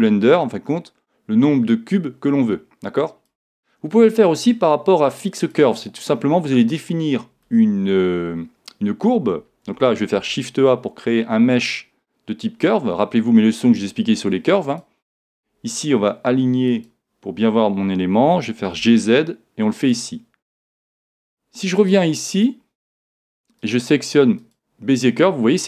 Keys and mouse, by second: 4.0 click, 10.1 shift+a, 16.7 click, 18.2 g, 19.9-25.5 drag, 22.3 right click.